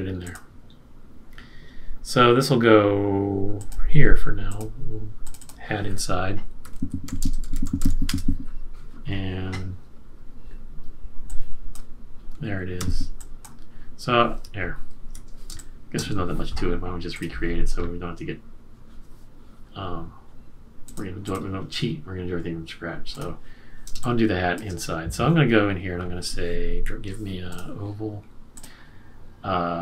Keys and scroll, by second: 6.4-8.2 typing, 9.5 typing, 12.7 z, 15.5 space, 23.9 space.